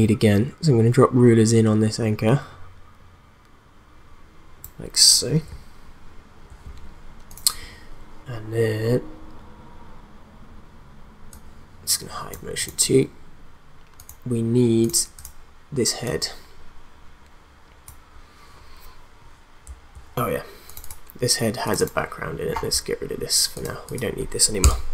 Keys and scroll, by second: 24.6 BackSpace.